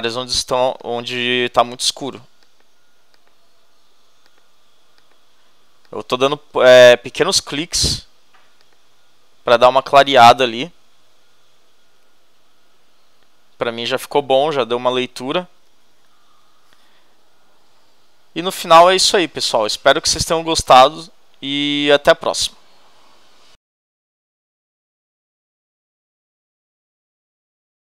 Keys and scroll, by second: 16.0 super+-.